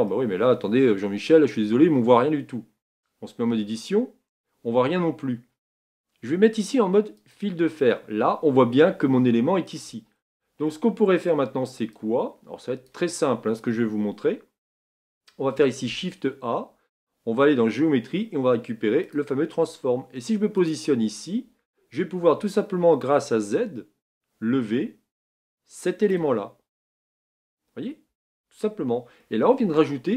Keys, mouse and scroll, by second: 0.1-1.7 middle drag, 1.7-2.4 scroll up 4, 2.4-3.6 scroll down 2, 3.6 Tab, 4.8 Tab, 7.2 click, 7.9-20.6 middle drag, 23.6-27.2 drag, 27.2 Tab, 28.1 Tab.